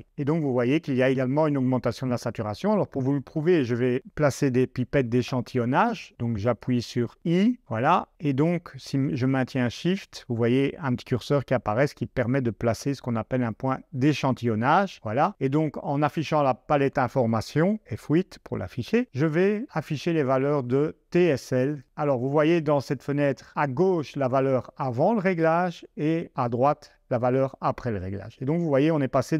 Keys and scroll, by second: 4.9 i, 7.1 i, 17.8 F8.